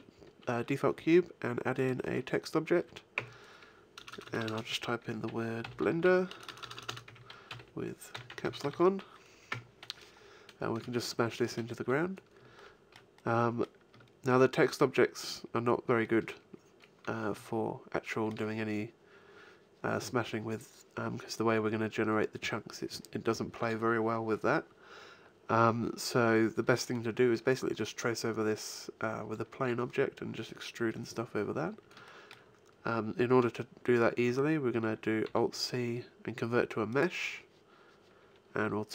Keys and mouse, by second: 3.1 Tab, 3.9-4.5 BackSpace, 5.6-8.7 typing, 9.5 Tab, 15.0-16.0 middle drag, 32.0-34.2 middle drag, 35.2 alt+c.